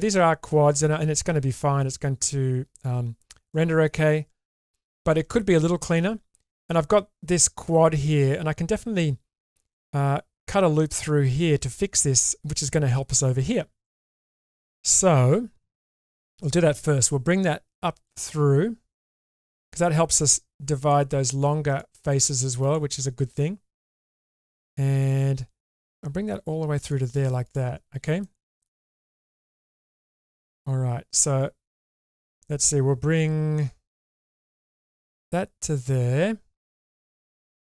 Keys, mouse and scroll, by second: 3.5 shift+middle click, 4.9 shift+middle click, 13.8 shift+middle click, 16.8 k, 27.4 click, 28.2 shift+middle click, 30.0 shift+middle click, 33.3 k, 37.1 2.